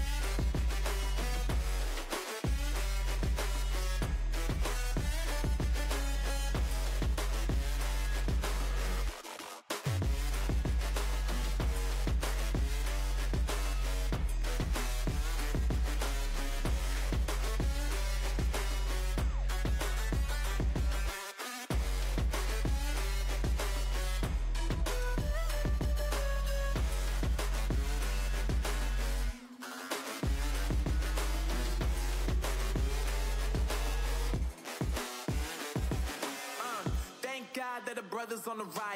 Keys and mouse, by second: 2.0 ctrl+r, 3.9 z, 6.9 z, 7.2 a, 7.4 a, 10.8-11.9 right drag, 11.0-12.8 drag, 13.4 ctrl+r, 17.0 c, 18.7-20.3 drag, 18.9 z, 19.4 z, 20.3 c, 21.0 z, 22.2 ctrl+r, 23.6 z, 24.2 click, 24.3 a, 24.4 a, 25.1 click, 25.6 z, 25.8 Tab, 27.9 Tab, 28.2 z, 29.7 ctrl+r, 31.3 ctrl+r, 33.6 ctrl+r, 35.5 z, 38.6 Tab.